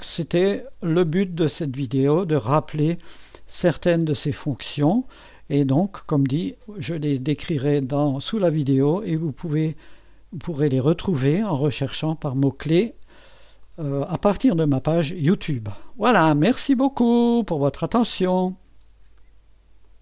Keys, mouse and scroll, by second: 0.0 click, 1.1-3.1 drag, 3.2-4.6 drag, 4.8 middle click, 8.8-12.3 drag, 12.3-12.9 scroll up 2, 12.9-13.7 scroll down 2, 13.7-17.1 drag, 18.3 click, 19.8 click.